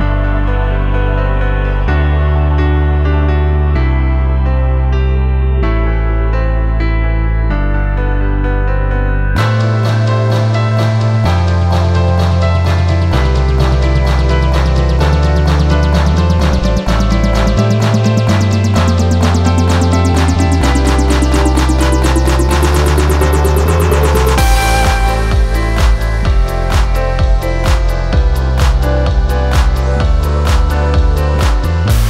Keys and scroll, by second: 1.3-4.5 typing, 1.9 Return, 3.3 Return, 4.6 Return, 5.9 p, 16.6 F1, 17.0 ,, 17.9 ctrl+d, 18.0 Escape, 19.4 ., 24.6 F2, 27.8 p, 29.6 F1, 31.7 ctrl+d, 31.9 Escape.